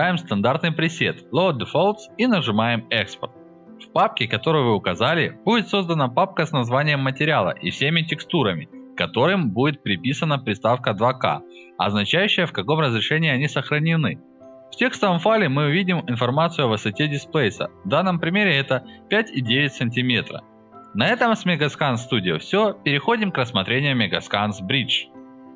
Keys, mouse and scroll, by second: 0.5 click, 2.9 click, 3.6 click, 4.4 click, 4.5 click, 5.4 click, 7.2 click, 9.5 click, 9.7 click, 10.1 click, 10.3 click, 10.5 click, 10.7 click, 12.1 click, 12.9 click, 13.4 click, 16.4 click, 17.2 click, 18.0 click, 18.4 click, 19.2 click, 19.4 click, 21.4 click, 21.7 click.